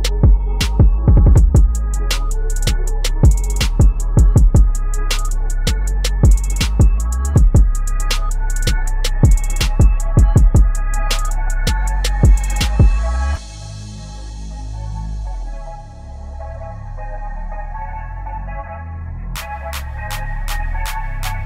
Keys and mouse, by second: 1.0-2.8 alt+shift+drag, 2.8 shift+Up, 7.3 u, 8.5-14.7 drag, 14.7-16.9 drag, 20.1 ctrl+t, 20.3-21.4 drag.